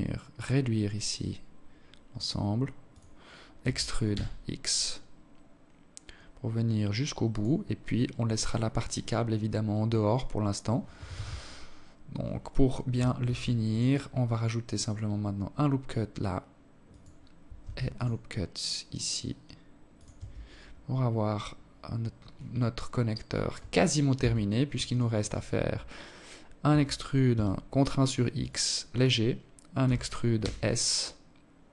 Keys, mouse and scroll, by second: 2.2 e, 6.4 scroll down 6, 7.5 scroll up 5, 7.8-8.2 scroll down 1, 8.4 scroll up 2, 9.7 z, 11.9 ctrl+r, 16.2 ctrl+r, 18.8 Tab, 19.1 scroll down 6, 21.4 alt+click, 22.3-23.0 scroll up 4, 22.8 Tab, 23.5 alt+right click, 25.3 e, 28.5 e.